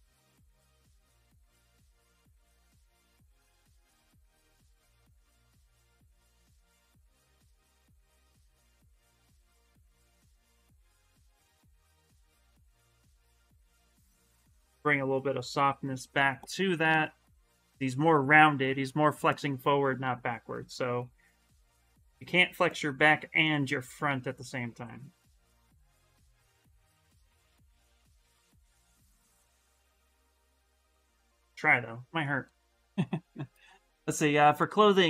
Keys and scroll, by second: 0.9 space, 7.8 ctrl+z, 25.9 s.